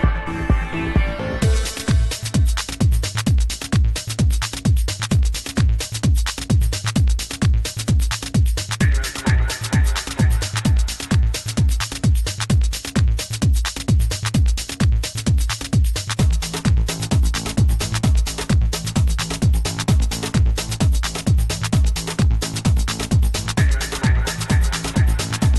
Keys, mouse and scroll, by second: 0.9-2.8 drag, 4.6-7.1 drag, 7.9-9.8 drag, 11.7-15.0 drag, 16.3-18.1 drag, 20.0-21.8 scroll down 1, 21.8-23.6 middle drag.